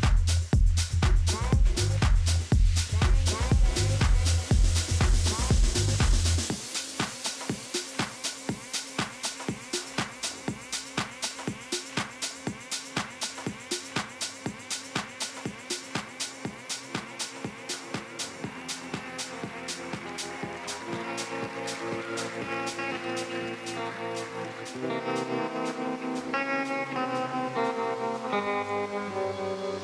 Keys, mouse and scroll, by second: 6.0-6.8 scroll up 1, 6.8 scroll down 1, 6.9-8.5 middle drag, 7.9 s, 11.7-14.4 middle drag, 14.4 scroll up 1, 14.5-16.1 middle drag, 16.1-18.0 drag, 17.6-21.0 middle drag, 20.5 Tab, 22.2 KP_Decimal, 24.7 z, 26.1 a, 26.9 middle click, 27.3 middle click, 28.3-29.3 middle drag.